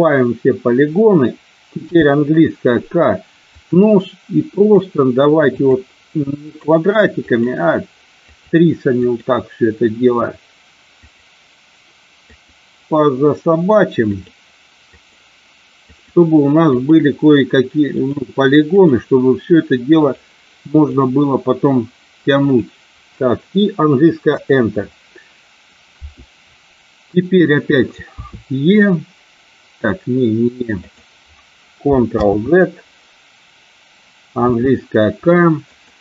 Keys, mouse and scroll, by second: 1.8 k, 28.2 e, 30.8 click, 32.0 ctrl+z, 34.4 k.